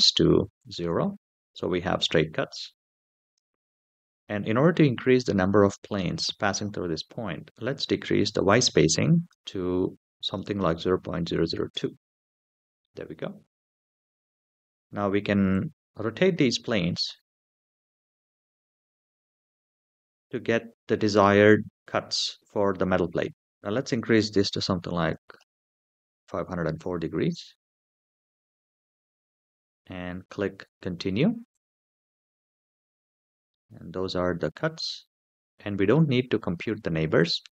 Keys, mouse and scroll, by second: 1.6-3.8 middle drag, 8.2 click, 9.0-11.5 drag, 11.0 KP_0, 12.6-13.7 middle drag, 15.3-20.4 drag, 22.4-23.0 middle drag, 23.7-25.4 drag, 26.7-28.3 middle drag, 29.6-30.6 scroll down 3, 31.3 click, 33.3-34.4 middle drag, 37.0 click.